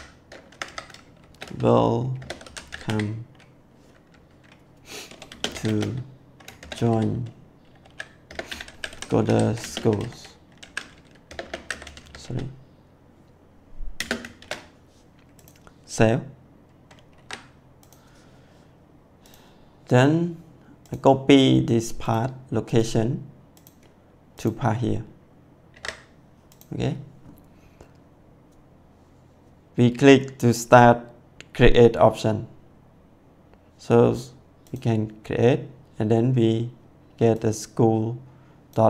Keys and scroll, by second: 0.4 Left, 1.1-2.8 typing, 5.1-12.1 typing, 13.9 space, 14.3 shift+1, 17.1 ctrl+s.